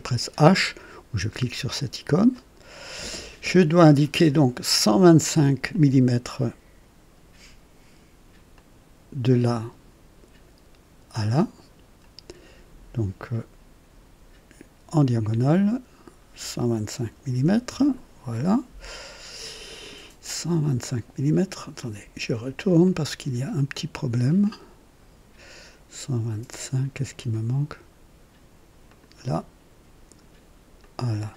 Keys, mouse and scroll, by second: 1.3 h, 2.3 right click, 5.7 click, 8.5 click, 15.4 click, 17.0 KP_1, 17.4 KP_2, 17.4 KP_5, 17.7 KP_Enter, 21.8 click, 22.8 right click, 24.4-27.5 drag, 28.8 click, 30.8 click.